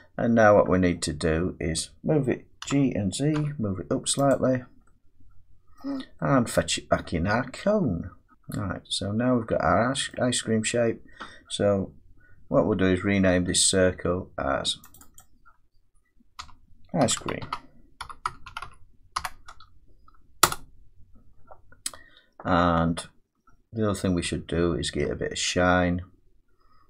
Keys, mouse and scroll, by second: 0.9 middle click, 2.6 g, 3.3 z, 4.3 click, 4.5-5.7 scroll down 4, 5.8 middle click, 7.8-8.9 scroll down 8, 8.6 middle click, 10.1 middle click, 14.9 click, 15.2 click, 16.4-19.1 typing, 20.4 Return, 23.0-24.2 scroll, 24.2 scroll.